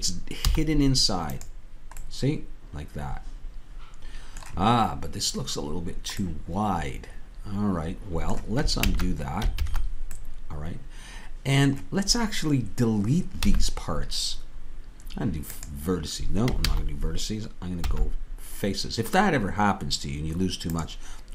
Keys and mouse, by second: 0.4 z, 2.0 middle click, 6.9-8.8 middle drag, 8.8 ctrl+z, 13.5 x, 16.6 ctrl+z, 17.8 x.